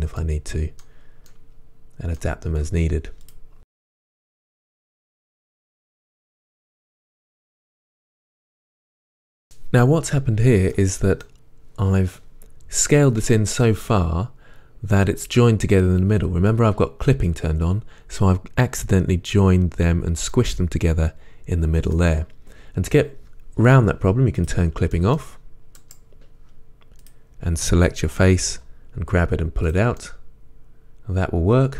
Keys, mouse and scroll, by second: 0.5-3.3 middle drag, 3.3 click, 3.6 g, 3.8 click, 3.8 middle click, 4.0 shift+middle drag, 4.8-8.5 typing, 5.8 right click, 6.0 click, 6.1 ctrl+z, 6.6 click, 7.0 shift+middle click, 7.6 click, 8.1 click, 8.8 right click, 8.9-20.7 middle drag, 9.0 ctrl+z, 13.8-20.4 scroll up 2, 21.9-24.4 middle drag, 24.4 click, 25.0-27.1 middle drag, 27.1 click, 28.6 g, 29.7 click, 30.0-31.1 middle drag.